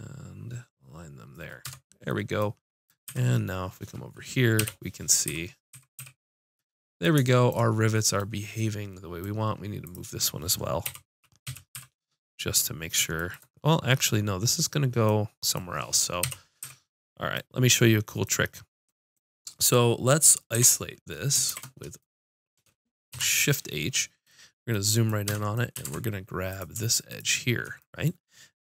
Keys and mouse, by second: 1.7 Tab, 3.1 z, 4.6 KP_5, 5.3 z, 5.7 z, 6.0 a, 9.9-10.9 drag, 10.9 KP_7, 11.5 KP_5, 11.8 z, 16.2 KP_5, 16.6 z, 20.5 alt+h, 21.5 shift+h, 23.1 KP_Decimal, 25.3 Tab, 25.9 ctrl+Tab.